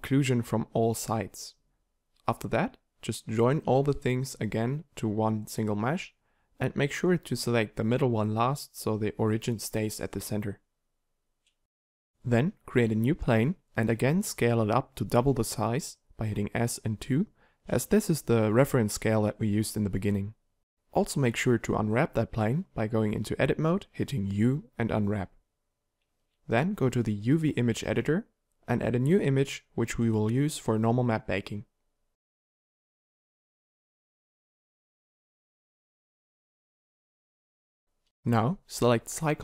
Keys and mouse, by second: 1.0 middle click, 1.2 a, 1.4 middle click, 3.3-6.4 drag, 6.4 a, 6.6 b, 9.0 click, 9.9-11.5 drag, 11.5 ctrl+j, 12.7 shift+a, 13.8 g, 15.0 s, 21.9 Tab, 22.6 u, 24.2 Tab, 35.8 Tab, 37.0 Tab.